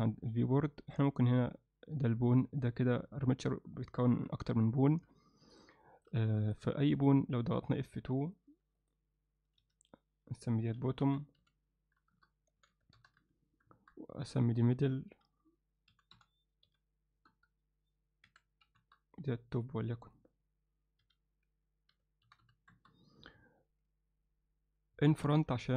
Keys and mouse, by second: 1.0 click, 4.1 e, 5.0 e, 5.8 alt+shift+middle click, 6.4 ctrl+alt+middle click, 7.0 click, 7.6 click, 8.8 click, 9.6 F2, 14.2 click, 15.1 F2, 19.6 click, 20.0 click, 21.0 F2.